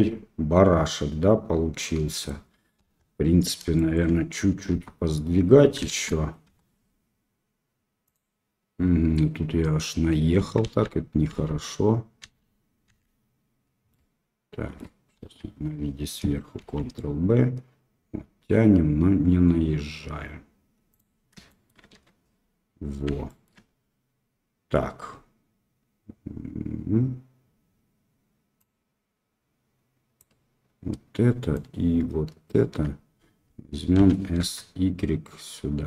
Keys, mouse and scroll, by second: 2.8 KP_7, 3.7 shift+middle click, 4.7 Tab, 5.9 shift+z, 6.4 1, 10.6 ctrl+z, 13.9 click, 15.2 KP_7, 16.5 ctrl+b, 21.4 shift+click, 21.9 1, 23.2 shift+click, 28.6-30.1 drag, 31.6 shift+click, 33.9 s.